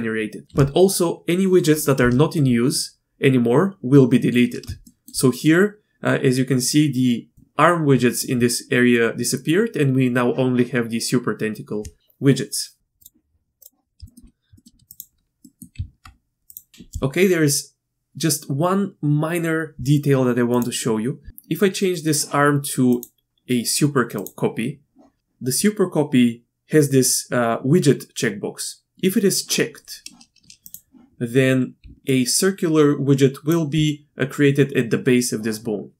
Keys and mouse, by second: 4.8 shift+middle drag, 7.3 click, 7.3-8.3 d, 12.8 q, 13.6 click, 14.0 shift+middle click, 14.5 shift+middle click, 14.9 click, 15.4 click, 15.7 Tab, 16.5 click, 23.0-24.2 drag, 30.7 click, 31.8-33.8 d, 32.0-33.5 drag.